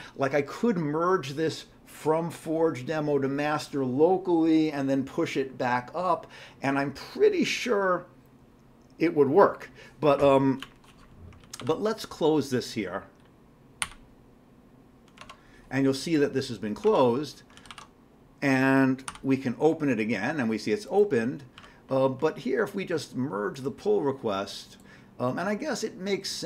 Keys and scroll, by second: 11.5 ctrl+c, 11.6 ctrl+e, 13.8 y, 15.2 alt+Tab, 16.8 alt+Tab, 17.6 ctrl+c, 17.7 ctrl+e, 19.1 y.